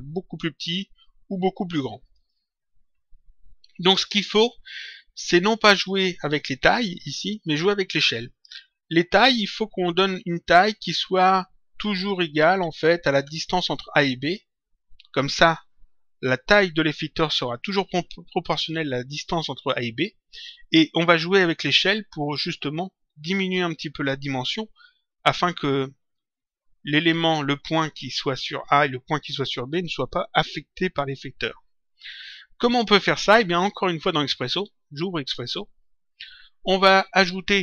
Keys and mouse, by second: 35.2 click, 36.5 click.